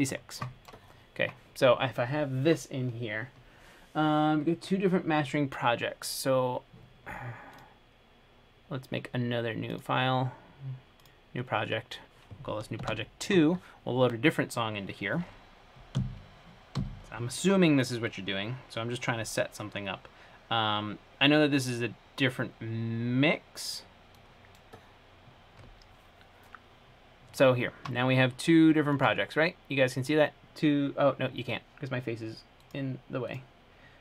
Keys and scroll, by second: 13.0 Return, 17.0 F5.